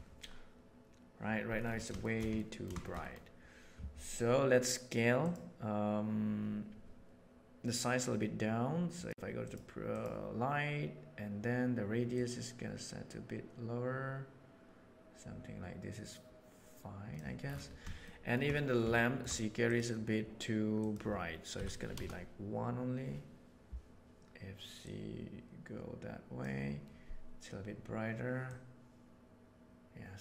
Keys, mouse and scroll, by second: 1.9 middle click, 2.3 ctrl+middle click, 2.7 shift+middle drag, 2.9 click, 8.9 click, 9.3 click, 9.7 click, 12.2-16.5 drag, 16.5 right click, 18.0 shift+middle drag, 18.9 shift+middle drag, 20.7-23.7 right drag, 24.7-26.3 right drag, 26.3-28.4 middle drag, 28.4-29.7 right drag.